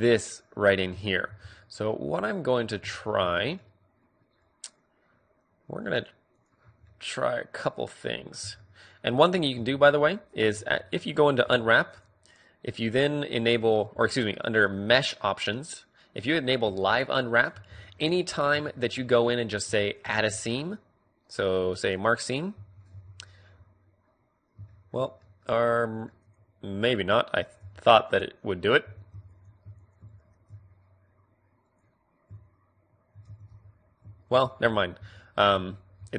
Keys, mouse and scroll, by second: 1.0-5.2 middle drag, 5.8-6.8 right drag, 6.8-9.1 middle drag, 8.4 a, 9.5 t, 10.5 a, 11.4 u, 14.5-17.1 drag, 17.1-20.6 middle drag, 17.5 a, 19.7-21.0 drag, 20.1 ctrl+e, 21.0 right click, 22.5 a, 22.8 a, 23.9-26.2 middle drag, 26.2 click, 26.3 middle click, 27.0 click, 27.5 u, 27.9 click, 28.8 a, 29.2-31.4 right drag, 30.0 ctrl+e, 33.2 a, 33.4 a, 34.3 ctrl+z, 34.6 ctrl+z, 35.0 ctrl+z, 35.3 ctrl+z, 35.9 ctrl+z.